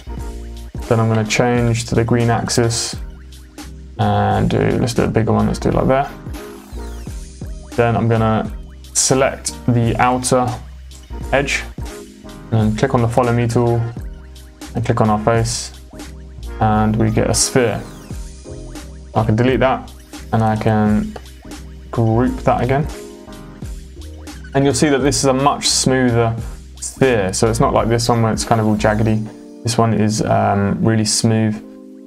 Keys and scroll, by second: 1.3 Up, 1.5 Left, 18.1 space, 19.2 Delete.